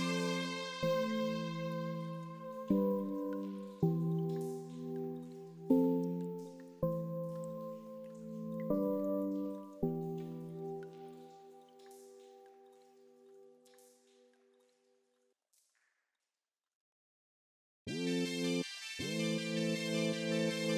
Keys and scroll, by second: 0.7 ctrl+space, 13.8 ctrl+space.